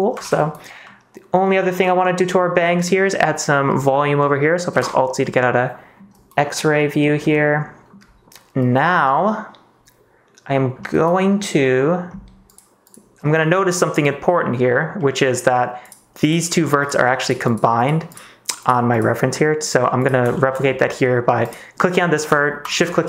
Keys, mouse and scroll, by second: 0.2 ctrl+s, 3.0 middle click, 3.8 middle click, 4.7 alt+z, 5.2 middle click, 8.9-10.7 middle drag, 13.5 middle click, 14.2 middle click, 14.9 middle click, 15.8 click, 16.2 click, 17.7 click, 18.0 click, 19.3 middle click, 20.3 shift+middle click.